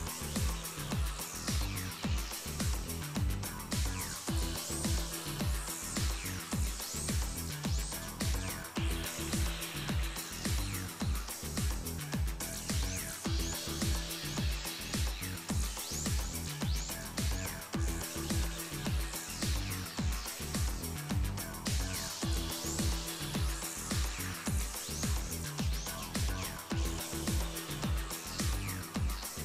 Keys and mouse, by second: 1.3-4.1 drag, 4.1 middle click, 4.5-5.5 right drag, 4.7 ctrl+Tab, 6.0-7.2 drag, 6.5 g, 7.2 right click, 7.3 g, 9.1 click, 9.7 g, 10.7 g, 12.3 click, 12.7 right click, 13.4 right click, 13.8 click, 14.4-18.2 middle drag, 18.2 right click, 18.4 g, 20.9 right click, 21.9 middle click, 22.4 middle click, 22.9 Tab, 24.0 click, 24.3 Tab, 24.5 middle click, 24.9 click, 24.9 middle click, 26.7-29.4 drag, 28.6 Tab, 29.1 Tab.